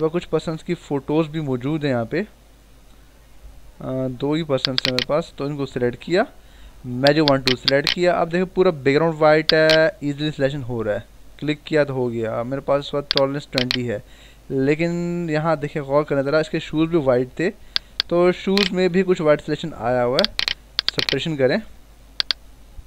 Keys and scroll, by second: 6.4 w, 14.1 ctrl+=, 19.0 ctrl+=.